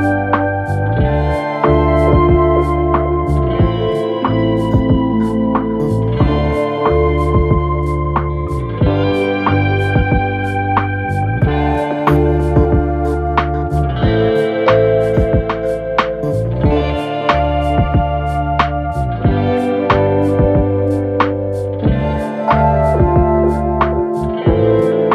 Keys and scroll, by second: 6.2 ctrl+e, 11.1 ctrl+shift+e, 24.9 ctrl+-.